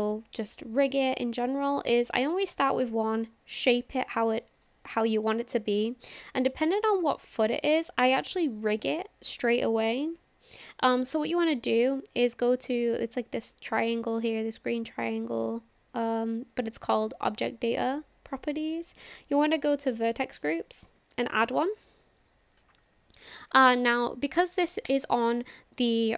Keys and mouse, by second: 2.0-2.5 drag, 2.7 click, 3.1-4.0 drag, 4.0-4.7 middle drag, 7.6-9.5 middle drag, 11.4-11.9 middle drag, 21.5 click, 22.3 click, 22.8 click, 23.6 click, 23.7-26.1 drag.